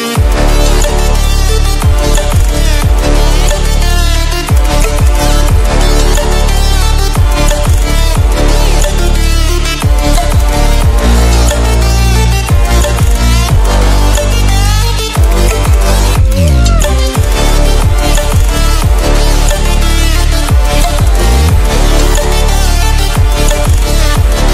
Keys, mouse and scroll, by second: 2.0-2.4 scroll up 1, 4.0-11.6 drag, 11.7 scroll up 1, 12.1-21.2 drag, 20.9 ctrl+w, 23.2 ctrl+w.